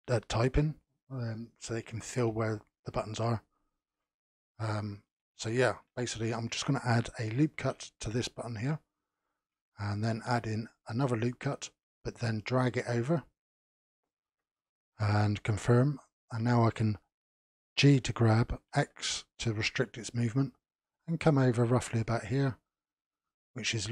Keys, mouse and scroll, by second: 4.6 scroll up 4, 5.4-7.5 shift+middle drag, 7.5 ctrl+r, 9.2-10.1 scroll down 1, 10.1 ctrl+r, 17.8 g.